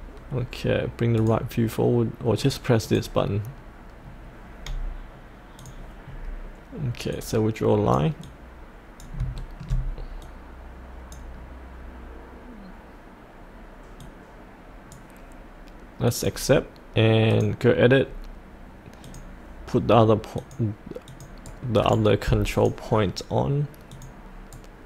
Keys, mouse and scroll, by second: 1.1 click, 4.0-5.6 scroll down 1, 5.6 click, 6.1-7.1 scroll down 1, 7.1-9.2 drag, 9.4 shift+middle click, 9.7-10.2 scroll up 1, 10.2-15.6 drag, 21.4 right click, 22.5 click, 24.5 right click.